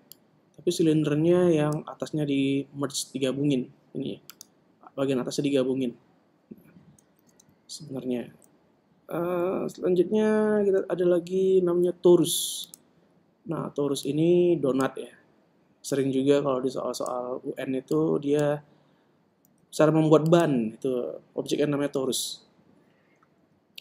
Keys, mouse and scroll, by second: 0.6 click, 4.8-7.8 right drag, 7.8 ctrl+Tab, 8.5 ctrl+Tab, 10.9 shift+a, 14.5-18.2 drag, 18.3 middle click, 18.5 click, 20.1 s, 20.3-22.0 middle drag.